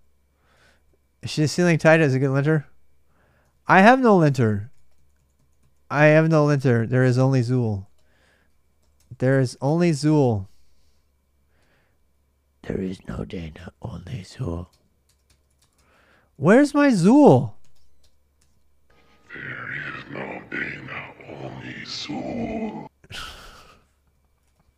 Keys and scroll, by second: 0.4 ctrl+[, 0.4 ctrl+j, 0.6 k, 1.7 ctrl+[, 1.7 ctrl+j, 1.7 k, 3.2 ctrl+[, 3.6-6.8 typing, 7.7 Return, 8.0-9.3 typing, 9.4 Tab, 9.8 Return.